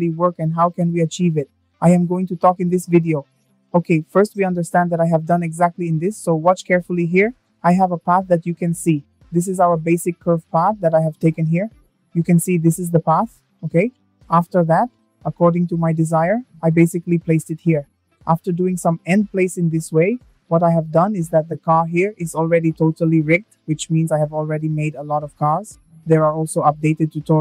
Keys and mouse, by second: 3.7 space, 6.0 click, 7.3 shift+middle click, 9.2 click, 15.8-16.5 shift+middle drag, 23.0 click.